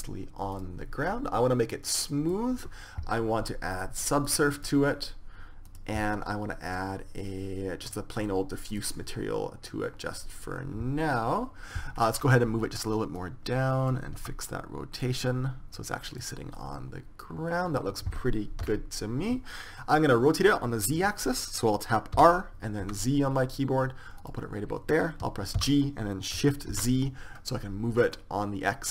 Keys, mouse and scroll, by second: 1.2-7.0 drag, 7.3-11.1 drag, 13.9-15.7 drag, 15.0 r, 16.4 click, 17.3-18.3 drag, 19.3 KP_0, 22.9 r, 25.1 g, 26.3 g.